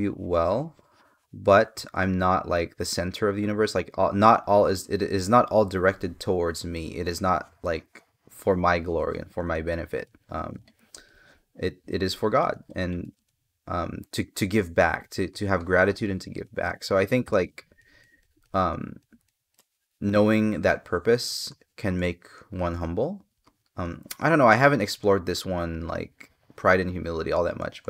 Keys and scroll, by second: 1.5 space.